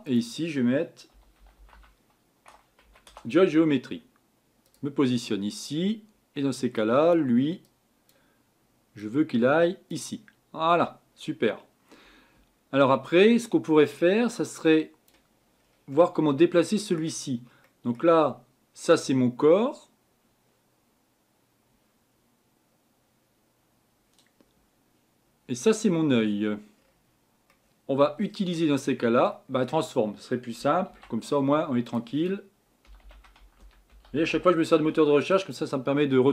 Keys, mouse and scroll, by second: 9.9 click, 10.7 scroll down 2.